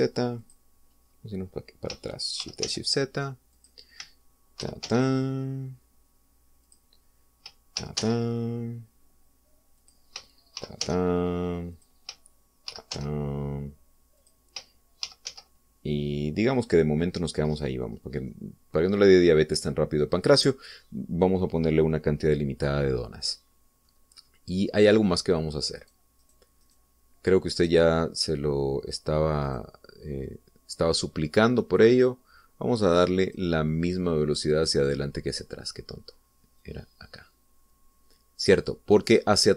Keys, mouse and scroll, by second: 0.3 shift+d, 0.5 shift+z, 1.3 click, 2.0 middle click, 2.0-2.6 scroll down 1, 3.3 shift+d, 3.6 shift+z, 4.4 click, 5.6 shift+d, 5.8 shift+z, 7.6 click, 8.7 shift+d, 9.0 shift+z, 10.8 click, 11.5 shift+d, 11.8 shift+z, 12.7 click, 13.6 shift+d, 13.9 shift+z, 15.2 click, 16.0 shift+d, 16.2 shift+z, 17.5 click, 18.0-18.4 scroll down 2, 18.4 scroll up 2, 19.2-22.0 middle drag, 22.1 scroll down 2, 23.1-23.5 scroll down 2, 23.8-25.0 middle drag, 25.1-25.8 scroll up 2, 26.7 right click, 27.2 middle click, 27.6 middle click, 30.4 click, 32.8 click, 34.2 click, 35.0-35.5 scroll down 1, 35.6-36.1 scroll up 3, 37.6-39.5 drag.